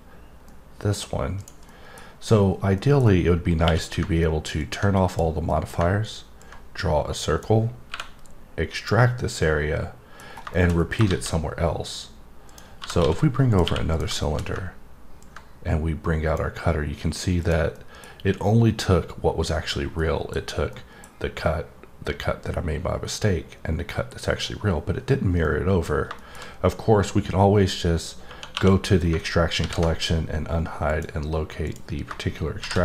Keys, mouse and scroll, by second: 0.5 middle click, 1.4 click, 1.6 middle click, 2.7 middle click, 4.6 click, 5.1 click, 5.5 middle click, 6.4 click, 8.8 click, 9.4 middle click, 10.2 scroll down 1, 10.5 middle click, 10.8 double middle click, 12.5 click, 13.5 click, 13.9 click, 14.2 middle click, 15.2 click, 17.4 click, 17.7 middle click, 20.0 middle click, 20.7 middle click, 25.4 middle click, 26.1 middle click, 30.7 click, 31.6 click.